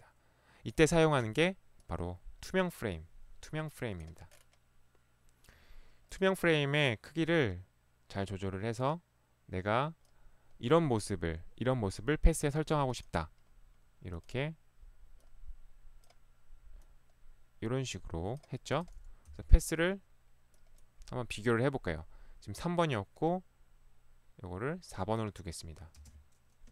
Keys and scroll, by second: 19.3 p, 26.0 space.